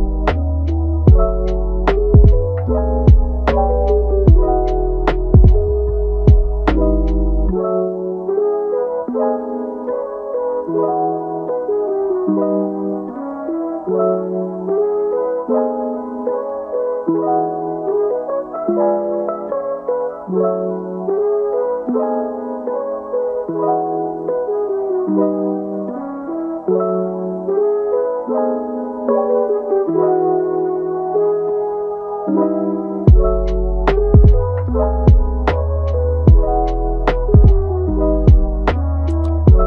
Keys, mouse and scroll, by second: 0.7-2.4 drag, 2.4-3.5 middle drag, 3.5-4.7 drag, 4.7 middle click, 5.4-5.7 scroll up 1, 5.7 shift+middle click, 6.2-6.5 scroll up 3, 6.5-8.3 middle drag, 8.3-11.4 drag, 11.4-12.1 scroll down 1, 12.1-14.4 drag, 14.4 scroll down 3, 14.6 middle click, 15.2 scroll down 1, 15.3 scroll up 4, 16.1 scroll up 3, 17.2-20.7 drag, 20.7-21.1 scroll down 5, 21.7 scroll up 2, 21.8 middle click, 22.7-23.9 scroll down 4, 23.9 click, 24.6 middle click, 25.2 click, 25.7 middle click, 26.2 click, 26.6 middle click, 27.3 click, 28.1 middle click, 28.6 click, 29.2 middle click, 29.7 scroll down 1, 29.9 middle click, 30.4 scroll up 2, 30.7 middle click, 31.5 KP_1, 33.5 click, 34.6-35.7 shift+middle drag, 35.7-37.3 scroll up 2, 37.3 click, 38.2-39.4 drag.